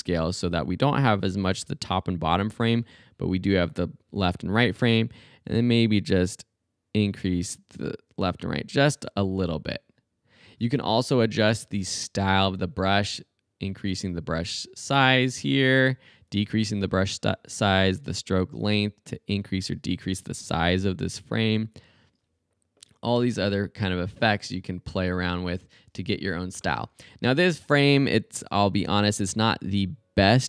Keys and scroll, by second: 16.3 super+z, 26.7 super+z.